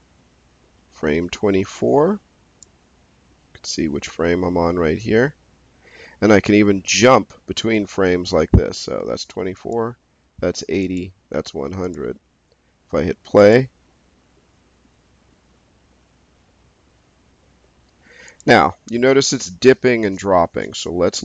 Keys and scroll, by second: 20.8 space.